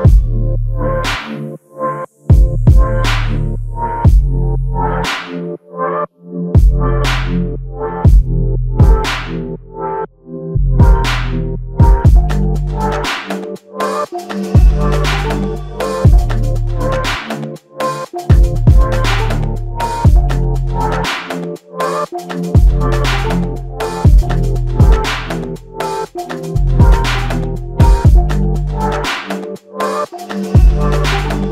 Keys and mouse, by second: 7.8 shift+click, 10.9 shift+click, 13.5 shift+click, 15.5 f, 17.5 double click, 20.2 f, 21.2 double click, 25.9 g, 25.9 f, 26.6 double click, 30.7 ctrl+alt+click.